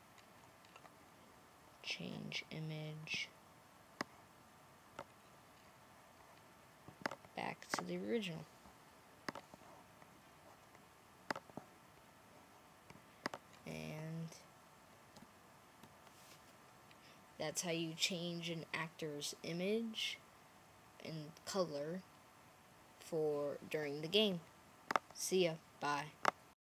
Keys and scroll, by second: 13.9-14.7 Right, 15.6 Right.